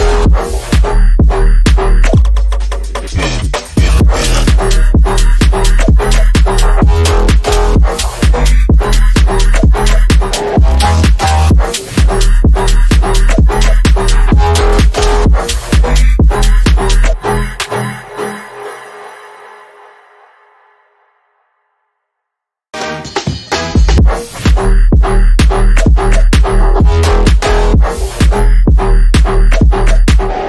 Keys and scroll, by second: 0.0 Escape, 1.0 ctrl+z, 4.6 shift+F2, 4.8 F3, 5.4 Escape, 10.6 F3, 15.0 F3, 15.4 Escape, 17.6 F3, 17.9 Escape, 29.4 F3, 30.2 space.